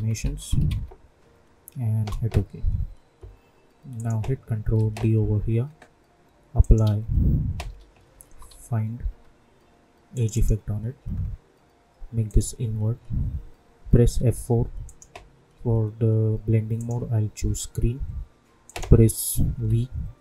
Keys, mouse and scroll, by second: 0.0-1.1 typing, 1.9 Return, 3.9 click, 4.7 ctrl+d, 6.7 click, 6.8 ctrl+a, 7.6-9.0 typing, 10.1 click, 14.1 F4, 14.8 click, 19.5 v.